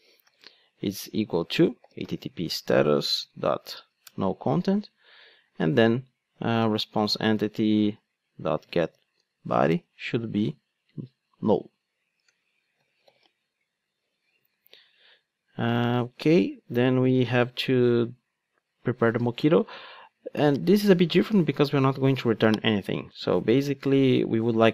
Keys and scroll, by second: 14.3 Return.